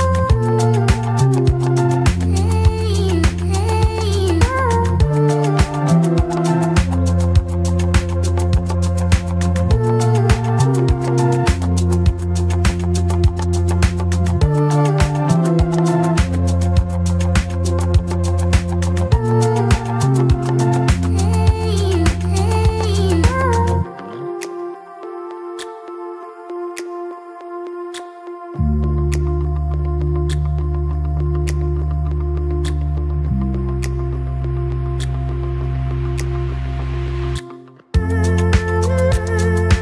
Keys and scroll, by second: 3.6 ctrl+=, 4.0 ctrl+=, 9.1 ctrl+t, 26.3 ctrl+-, 26.7 ctrl+-, 27.2 ctrl+-, 27.7 ctrl+=.